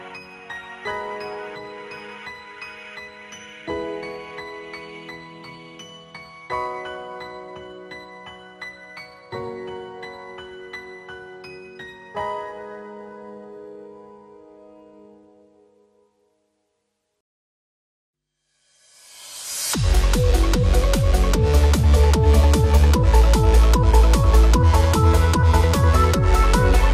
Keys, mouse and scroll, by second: 0.9 click, 2.4 shift+click, 3.6-4.0 alt+shift+drag, 6.1 space, 6.3 click, 6.4 space, 7.0 click, 7.6 shift+click, 8.7-10.6 alt+drag, 10.9-12.2 alt+drag, 12.7 Left, 13.7 click, 14.1 ctrl+-, 14.9 space, 15.2 click, 15.2 space, 17.2 F9, 17.8 ctrl+=, 18.2-20.2 typing, 18.4 click, 19.0 click, 19.5 ctrl+=, 19.8-20.2 click, 21.1 click, 22.5-26.0 typing, 24.8 shift+Return.